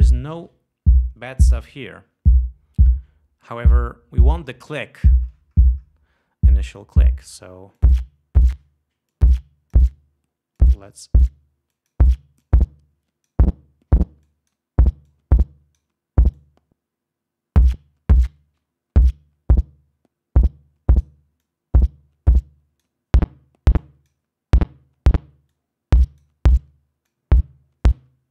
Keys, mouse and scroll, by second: 8.0 click, 9.3 click, 10.8-11.4 drag, 11.9 click, 12.6-13.7 drag, 14.4 click, 15.3-16.2 drag, 16.6-21.4 drag, 21.6-23.2 drag, 24.0-24.5 drag, 25.7 click, 27.3-28.3 drag.